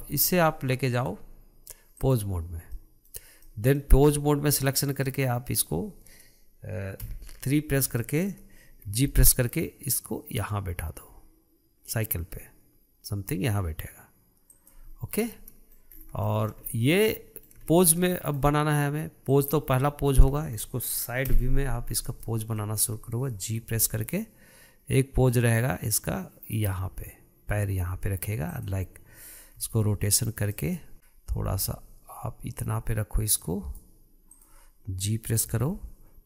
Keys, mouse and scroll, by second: 0.0-1.3 shift+middle drag, 1.3-3.1 drag, 3.1-4.9 middle drag, 4.9 click, 5.4-7.4 middle drag, 7.4 KP_3, 8.4-9.3 shift+middle drag, 9.3 g, 15.3-15.6 scroll down 1, 15.6-16.3 middle drag, 16.3 scroll up 5, 16.6-19.7 shift+middle drag, 19.7 click, 20.2-21.6 middle drag, 21.6 KP_3, 22.2-22.6 scroll up 2, 22.6-24.0 shift+middle drag, 24.0 g, 30.9 click, 31.4-32.1 scroll down 1, 32.1 r, 34.8 click, 35.9 g.